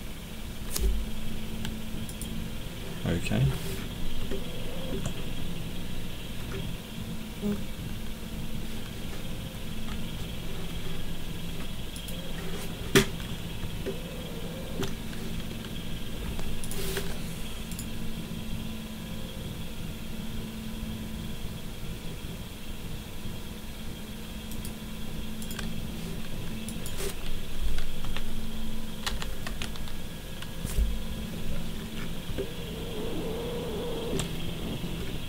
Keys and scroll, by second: 28.0 2, 29.0-29.4 typing.